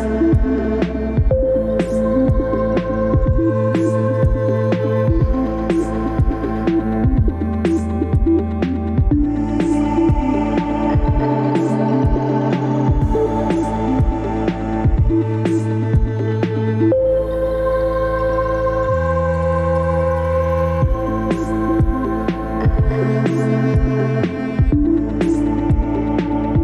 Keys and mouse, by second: 2.1-2.7 right drag, 3.8 click, 4.6 click, 4.9-9.1 drag, 10.5 Tab, 10.7 Tab, 11.1 3, 12.7-13.3 drag, 13.3 Tab, 13.5 Tab, 17.4 ctrl+b, 24.1 middle drag, 24.4 Tab, 24.7 Tab, 24.9-26.1 middle drag.